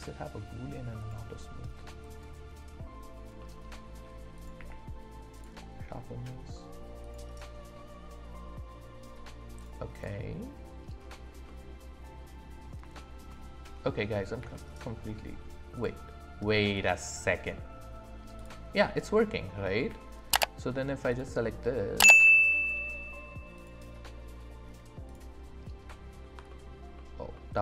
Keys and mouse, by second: 2.0 click, 3.4 middle click, 4.3 click, 4.6 q, 7.1-9.3 drag, 9.6 click, 11.4-12.6 middle drag, 12.9 shift+middle drag, 14.4 d, 16.8-17.4 drag, 18.4 click, 19.8 d, 23.5 click, 25.1 click.